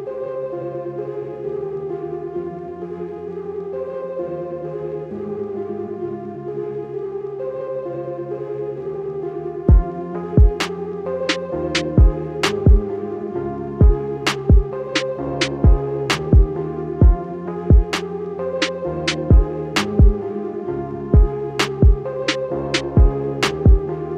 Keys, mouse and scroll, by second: 2.3 alt+scroll down 1, 3.0 alt+scroll up 1, 4.7-5.1 alt+scroll up 2, 6.6 click, 10.7 scroll down 1, 12.0 click, 14.9 scroll up 1, 15.6 scroll down 1, 16.7 scroll down 1, 17.2 scroll up 1, 19.7 scroll up 1, 21.5 scroll up 1.